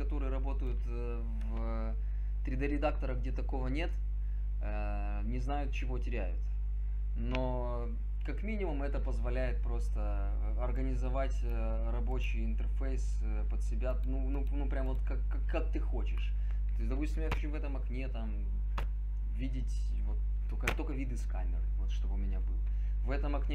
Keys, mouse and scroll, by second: 17.4 KP_3, 18.8 KP_5, 20.7 KP_0.